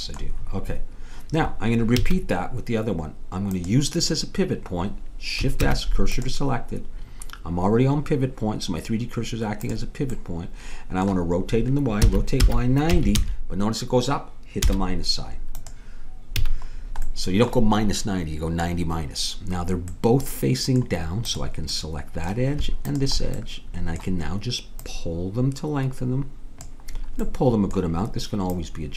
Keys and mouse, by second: 2.0 a, 3.5-5.4 drag, 5.6 shift+s, 9.7-11.4 drag, 10.2-12.1 middle drag, 10.2-11.4 right drag, 12.1 r, 16.4 a, 17.1-19.6 middle drag, 19.9 middle click, 21.3-24.8 drag, 24.9-26.5 drag, 28.5-28.9 drag.